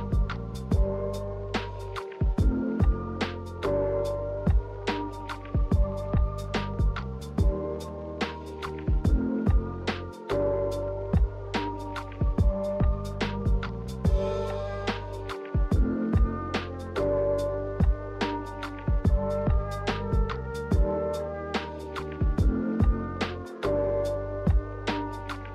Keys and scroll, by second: 22.7 z.